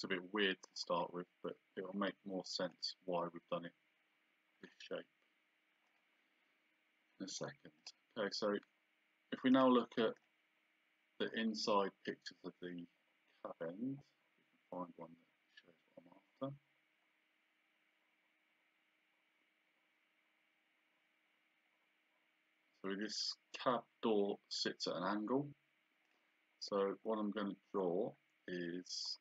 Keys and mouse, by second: 0.7 click, 5.9 click, 7.8 click, 9.5 click, 26.1 click.